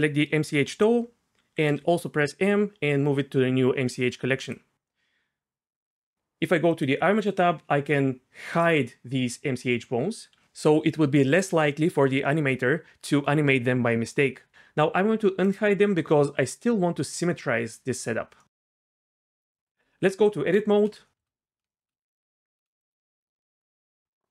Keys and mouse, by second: 1.7 m, 8.5 click, 19.8 Tab, 23.1 ctrl+z, 23.1 Tab.